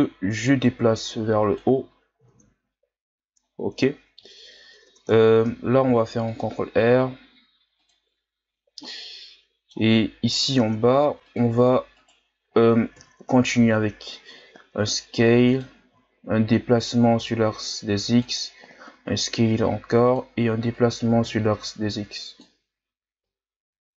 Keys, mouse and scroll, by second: 1.8-2.3 scroll down 1, 2.3 Tab, 2.6-3.3 scroll down 1, 3.3-3.8 scroll up 5, 3.8-4.6 ctrl+scroll down 2, 4.6 scroll up 2, 4.8 Tab, 5.8 ctrl+r, 8.9-10.5 middle drag, 10.5 ctrl+Tab, 11.9 right click, 13.0 KP_1, 14.4 s, 16.0-16.6 shift+scroll down 4, 16.8-18.9 drag, 18.9 s, 20.7-23.9 drag.